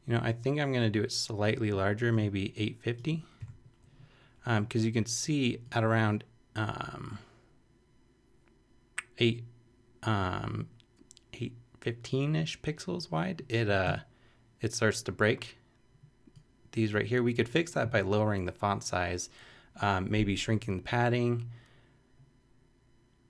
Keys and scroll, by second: 3.4 typing.